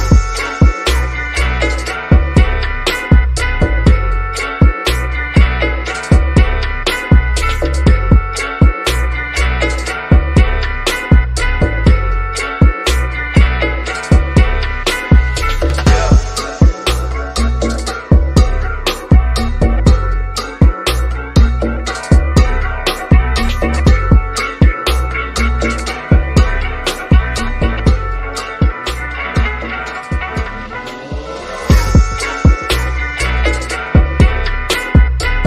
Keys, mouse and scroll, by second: 0.8-2.3 middle drag, 2.3 click, 3.9-4.3 scroll down 1, 5.0 click, 5.0 click, 6.0-6.4 scroll up 1, 8.1 shift+click, 8.7 shift+middle click, 10.0 click, 15.0 click, 16.3-17.0 scroll down 1, 19.3-20.1 scroll up 1, 20.1 click, 22.3 click, 23.0-23.7 scroll up 1, 23.8 shift+middle click, 23.9 shift+scroll up 1, 25.9 scroll down 1, 27.4-28.7 scroll down 1, 28.7-29.4 scroll up 1, 30.9-31.3 scroll down 1, 32.5 click, 34.3-35.4 scroll up 1.